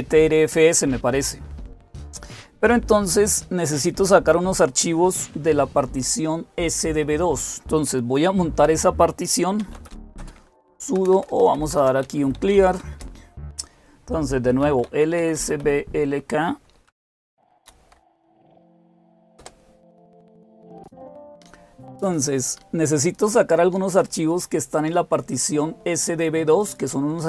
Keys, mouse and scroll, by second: 9.2-13.0 typing, 14.2-15.9 typing, 17.8 ctrl++, 19.3 Return.